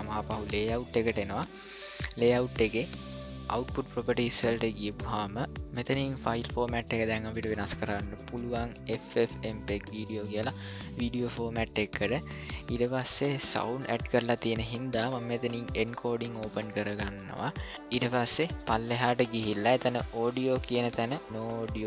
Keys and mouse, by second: 0.0-1.9 drag, 7.8-11.3 drag, 15.6 click.